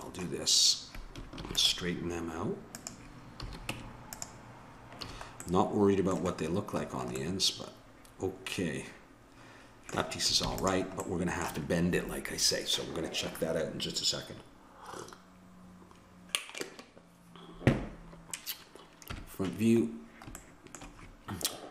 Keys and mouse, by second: 1.4 ctrl+r, 3.7 Tab, 3.7 a, 5.0 a, 5.4-6.6 middle drag, 7.1-9.0 middle drag, 10.4 ctrl+s, 19.1 KP_1.